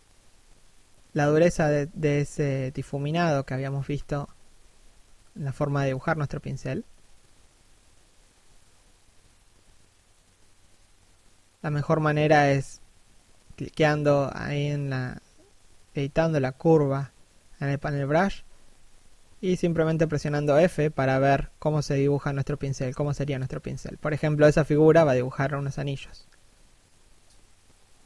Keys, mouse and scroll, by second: 6.5 click, 8.1 f, 8.5 click, 11.1 f, 13.3 right click, 14.7 f, 15.4 right click, 15.6 f, 16.9 right click, 19.2 f, 21.1 right click, 23.3 f, 25.7 right click, 26.1 f, 26.5 click, 27.6 click.